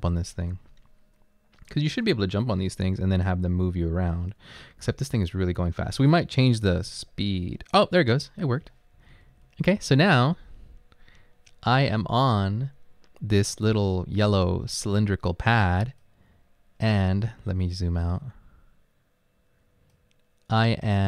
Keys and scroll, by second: 4.2 Left, 4.6 Down, 5.4 Up, 6.9 space, 8.1 Right, 8.5 Right, 9.1 Right, 9.3 Up.